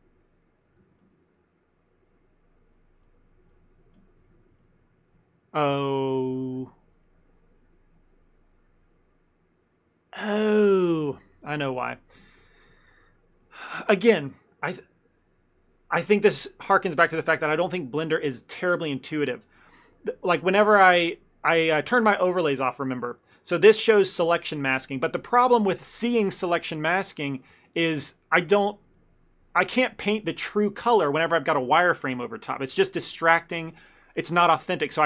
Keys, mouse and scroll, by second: 0.9 shift+f, 2.1 middle click, 3.1 click, 4.0 click, 6.8 middle click, 7.1 middle click, 10.6 middle click, 11.0 middle click, 11.4 ctrl+z, 11.8 ctrl+z, 12.7 ctrl+z, 20.5 click, 21.0 click, 23.3 click, 25.0 middle click, 27.9 shift+middle click, 29.0 middle click, 29.4 middle click, 29.6 shift+middle click.